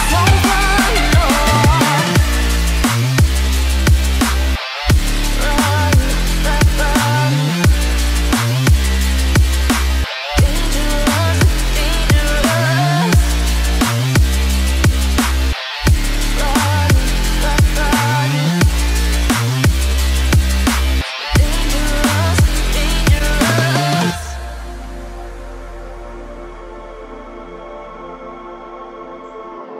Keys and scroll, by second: 1.8 ctrl+s, 9.3 ctrl+t, 15.6 Return, 16.9 ctrl+s, 24.4 ctrl+0.